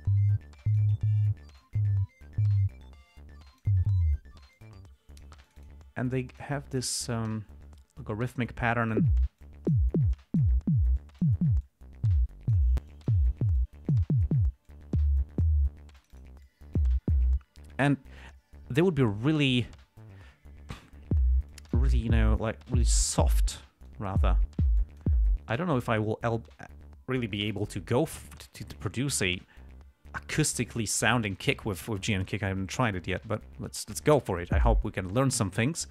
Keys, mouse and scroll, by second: 0.1 click, 1.9-4.1 drag, 4.9-5.7 drag, 5.8-6.9 drag, 7.2-7.8 drag, 8.0-8.9 drag, 9.0 click, 9.7-10.2 drag, 10.5-10.9 drag, 11.3-11.8 drag, 12.0-13.1 drag, 13.2 click, 13.9 click, 15.0-16.0 drag, 16.3 click, 16.8-17.3 drag, 21.8 click, 22.8 click, 24.2 click, 25.1-25.5 drag.